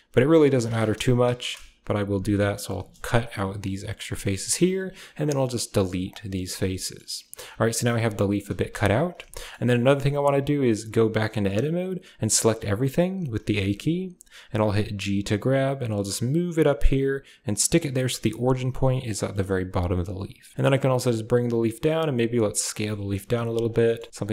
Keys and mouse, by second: 1.6 1, 1.9 2, 2.3 3, 2.5 click, 3.1 shift+click, 4.1 x, 5.9 typing, 6.6 shift+middle click, 7.2 Tab, 7.7-8.2 middle drag, 8.7 KP_1, 9.3 shift+middle click, 10.7 Tab, 12.1 a, 13.2 a, 13.3 a, 15.1 g, 17.6-18.2 typing, 19.5 Tab, 20.5 g, 21.6 s, 22.7-24.3 typing.